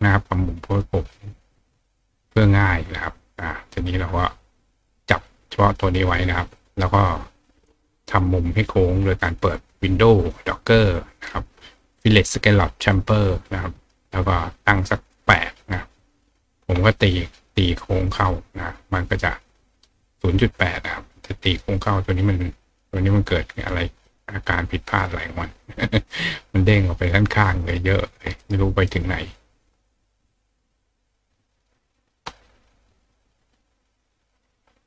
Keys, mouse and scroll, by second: 0.7 click, 1.3 click, 3.9 click, 4.7 click, 9.2 click, 10.7 click, 12.9 click, 15.1 click, 17.6 click, 19.4 click, 20.6 click, 21.7 click, 22.8 click, 23.6 click, 24.0 click, 24.7 click, 27.9 click, 28.4 right click, 30.3 click, 31.4 click, 33.0 click, 33.6 click.